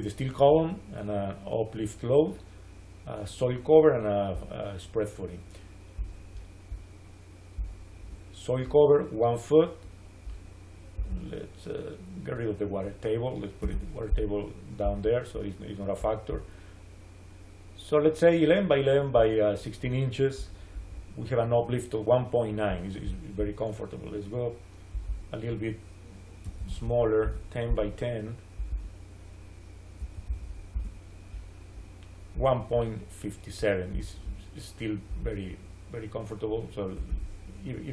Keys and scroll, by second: 13.5 3, 13.6 Return, 26.1-27.0 typing, 27.1 Return, 29.9 1, 30.1 0, 30.6 Return, 36.9 9, 37.0 Return.